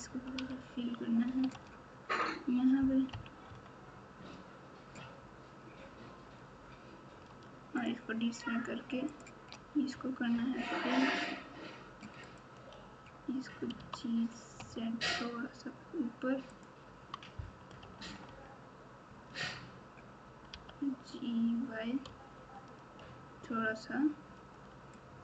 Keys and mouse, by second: 0.3 f, 1.4 alt+z, 3.1 KP_1, 3.4 KP_9, 7.7 shift+click, 9.1 shift+click, 10.3 f, 12.2 click, 13.7 g, 17.8 KP_4, 18.0 KP_4, 20.5 g.